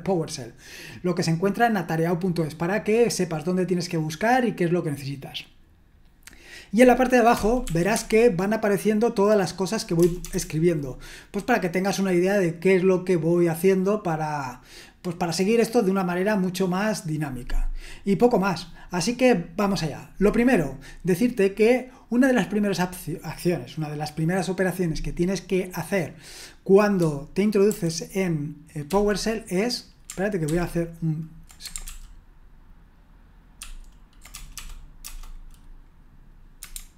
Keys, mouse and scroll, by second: 7.3-7.9 typing, 10.0 BackSpace, 10.2 BackSpace, 10.3 BackSpace, 28.8 Up, 33.6 ctrl+^, 34.3 BackSpace, 34.5 BackSpace, 35.0 BackSpace.